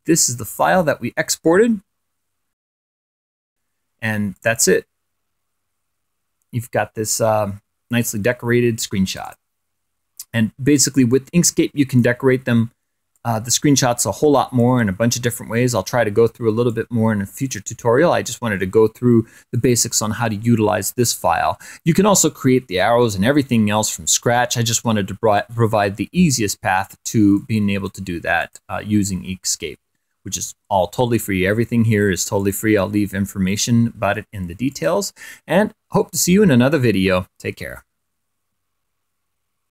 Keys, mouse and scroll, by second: 0.6 click, 2.3 click, 5.2 click, 5.9 Print, 10.3 click, 11.7 click, 12.8 click, 14.0 click, 16.1 click, 17.5 click, 18.3-18.7 scroll up 1, 25.2-26.4 scroll up 1, 26.4 scroll up 1, 27.2 click, 28.2-29.6 drag, 33.2 click, 35.6 click.